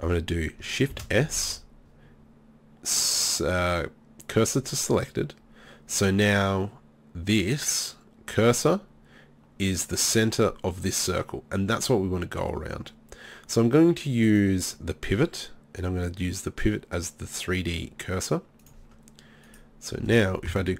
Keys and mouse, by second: 0.9 shift+s, 19.5-20.7 right drag.